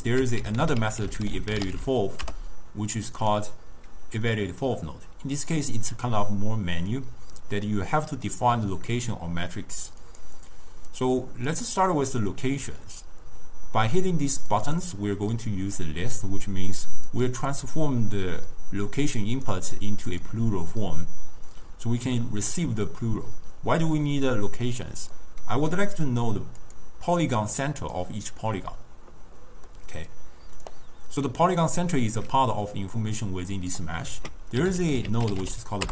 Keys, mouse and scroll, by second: 1.8 l, 5.4-8.5 drag, 11.0-14.1 drag, 14.9 click, 17.6 click, 19.2 click, 20.5 drag, 25.3-26.7 middle drag, 26.7 click, 27.3 click, 27.9 click, 29.5 middle click, 30.2 click, 31.3-34.2 drag, 34.2 ctrl+a.